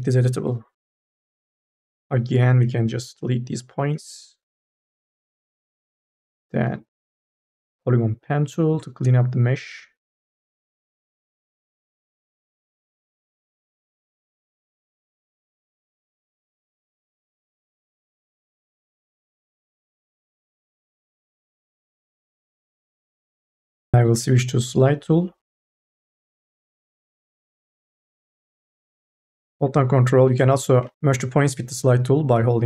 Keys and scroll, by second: 0.2 1, 2.4 Delete, 23.6 m, 24.0 o, 30.9 ctrl+z.